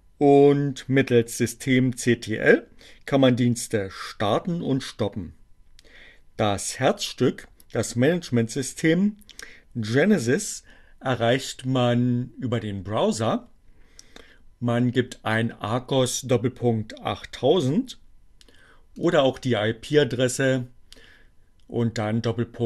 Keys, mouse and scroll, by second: 18.4 click.